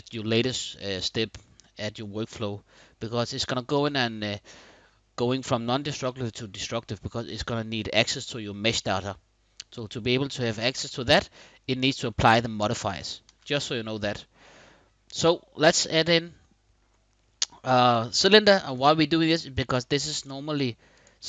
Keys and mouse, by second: 2.5-6.1 middle drag, 11.8-12.5 middle drag, 12.9 shift+a, 19.2 middle click, 19.9 click.